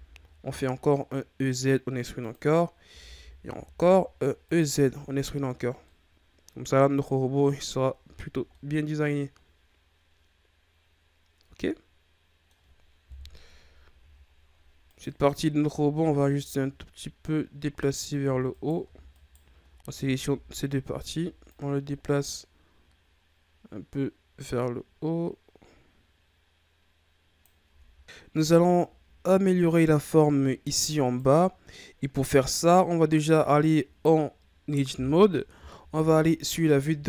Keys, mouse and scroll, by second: 2.9 e, 4.6 Tab, 5.1-5.7 scroll down 4, 5.8-6.5 middle drag, 6.5-7.4 scroll up 3, 7.5-8.1 ctrl+scroll down 4, 8.4-11.5 middle drag, 13.0 KP_1, 14.1-14.8 shift+scroll up 3, 14.8 right click, 15.6 Tab, 15.9 a, 16.1 a, 18.2 Tab, 18.4 right click, 19.1 shift+right click, 19.8 Tab, 20.2 a, 20.7 a, 21.4-24.4 drag, 27.6 Tab, 28.4-28.8 shift+scroll down 4, 29.1-29.8 scroll up 4, 29.8-30.4 shift+scroll down 4, 30.4-30.9 scroll up 2, 30.9 right click, 33.2 Tab, 35.9 KP_3.